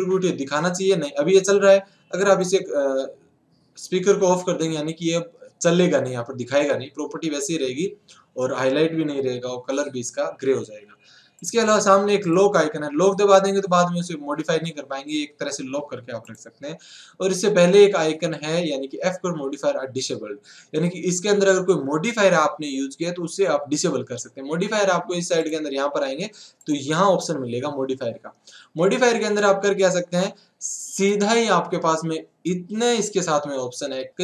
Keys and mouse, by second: 2.5-4.1 drag, 11.5-14.1 drag, 16.4-18.0 drag, 25.4 click, 28.0 click, 28.8 middle click, 29.4 middle click, 31.1-32.8 drag.